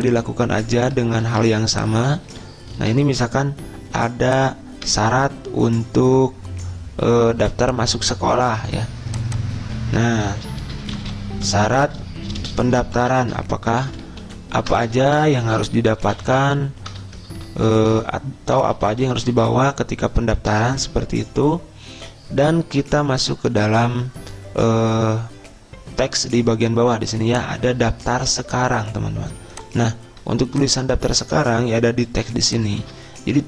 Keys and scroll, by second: 1.6 ctrl+c, 2.7 Return, 3.1 ctrl+v, 5.3 BackSpace, 5.8 BackSpace, 10.5-12.0 typing, 13.4 ctrl+shift+Right, 14.6 ctrl+shift+Down, 15.3-21.7 typing, 33.3 ctrl+a.